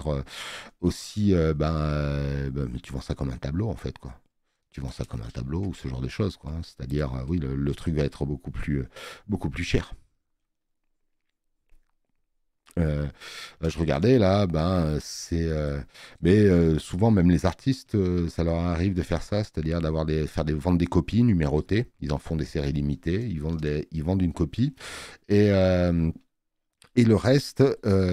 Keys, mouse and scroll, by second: 17.9 space, 17.9 click.